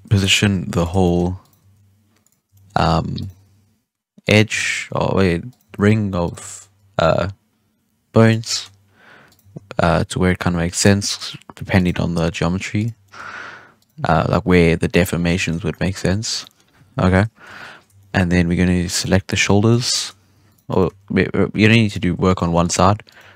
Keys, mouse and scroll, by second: 0.2 right click, 0.3 g, 1.0-1.3 shift+middle drag, 1.3 right click, 1.5 g, 2.5-3.1 shift+middle drag, 3.1 right click, 3.2 g, 4.5-5.4 shift+middle drag, 5.4 right click, 5.6 g, 6.4-6.7 shift+middle drag, 6.7 g, 8.4-9.2 shift+middle drag, 9.2 right click, 9.3 g, 10.9 shift+middle click, 11.7 right click, 11.9 g, 13.0-13.7 shift+middle drag, 13.7 right click, 13.9 g, 15.1 scroll down 1, 15.3 shift+middle drag, 15.5 scroll up 1, 15.6-15.9 middle drag, 15.9 z, 16.3-17.3 middle drag, 17.3 KP_1, 17.9 shift+middle drag, 18.1-18.9 scroll up 1, 18.9 right click, 19.8 shift+right click, 20.2 g, 20.6 right click, 20.8 g, 22.2 right click, 22.4 g, 23.0 right click, 23.1 g.